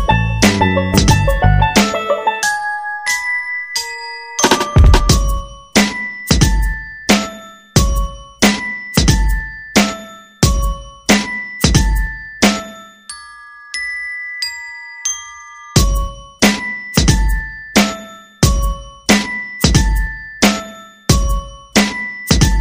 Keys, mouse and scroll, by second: 0.3 ctrl+scroll down 1, 1.8 ctrl+scroll down 1, 2.4 click, 3.3 shift+click, 4.3 shift+click, 5.2 shift+click, 6.1 click.